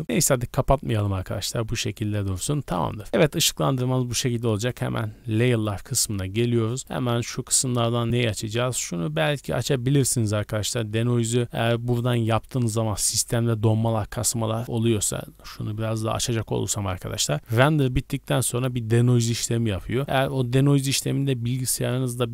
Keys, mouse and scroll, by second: 4.5 click, 5.4 scroll up 2, 6.8 click, 6.8-7.2 scroll up 4, 11.4 click, 11.6-14.1 scroll down 1, 14.1-14.6 scroll down 1.